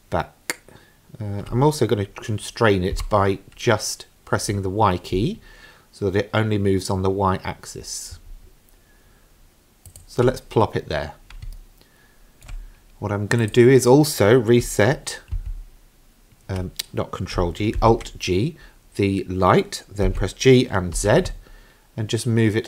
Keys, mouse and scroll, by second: 11.6-12.5 shift+middle drag, 13.4 click, 15.4 ctrl+g, 17.8 alt+g, 20.1 g.